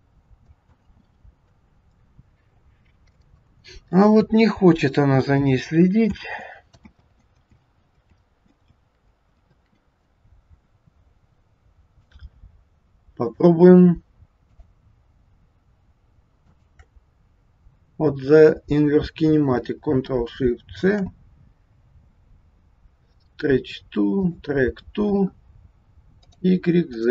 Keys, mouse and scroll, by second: 0.9 ctrl+z, 3.1 middle click, 6.3 ctrl+z, 7.0 ctrl+z, 7.7 ctrl+z, 8.3 ctrl+z, 8.9 ctrl+z, 9.5 ctrl+z, 12.0 click, 13.1 click, 14.4 click, 16.4 shift+click, 16.7 shift+click, 20.8 ctrl+shift+c, 26.2 click, 26.9 click.